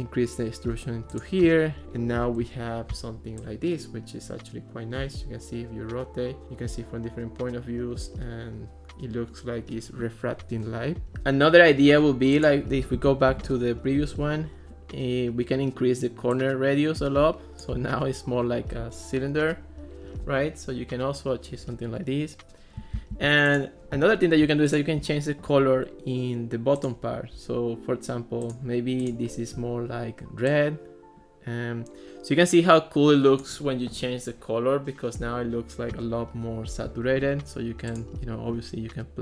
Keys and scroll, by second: 13.0 1, 13.3 6, 13.5 Return.